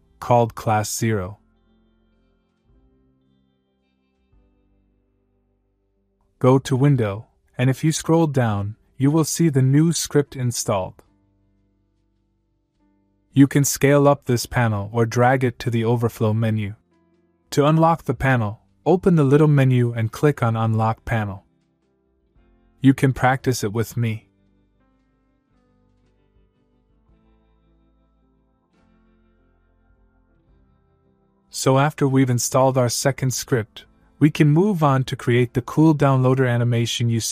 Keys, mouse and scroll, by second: 0.6 click, 3.1 click, 7.2 click, 9.1 click, 11.4 click, 14.6-15.7 click, 16.5-17.5 click, 19.9 click, 22.1 click, 29.5 click.